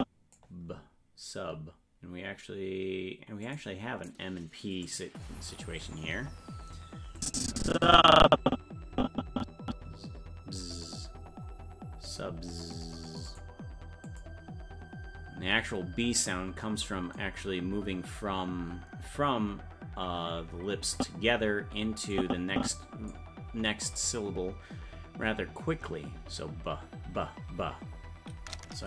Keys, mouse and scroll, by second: 3.4 click, 4.8 click, 7.2-10.6 drag, 10.9 scroll up 1, 11.5-12.2 scroll up 9, 13.3 click, 14.0 click, 21.0 click, 22.1 click.